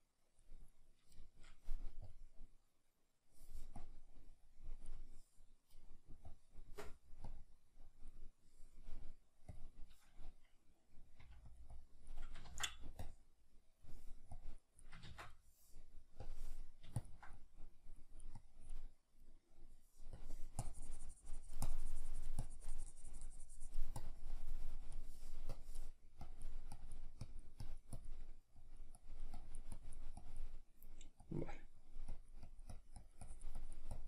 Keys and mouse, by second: 1.2-2.5 shift+middle drag, 2.5 click, 11.2 f, 11.6 click, 12.4 ctrl+z, 12.4-34.0 drag, 15.0 ctrl+z.